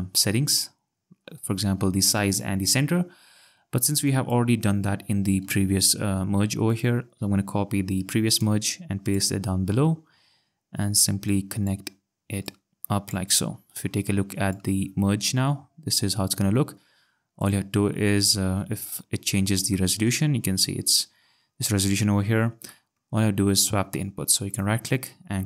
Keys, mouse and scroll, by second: 0.7 scroll, 4.0 click, 5.4 Delete, 6.7 click, 8.4 ctrl+c, 9.1 click, 9.7 ctrl+v, 11.3 click, 12.4 click, 14.5 click, 17.4 click, 18.9 ctrl+scroll, 22.7 click, 24.5 right click.